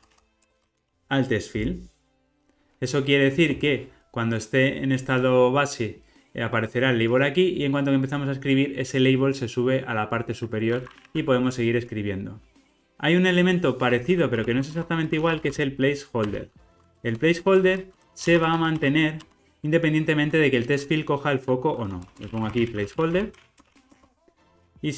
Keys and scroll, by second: 1.6 ctrl+r, 16.2 Return.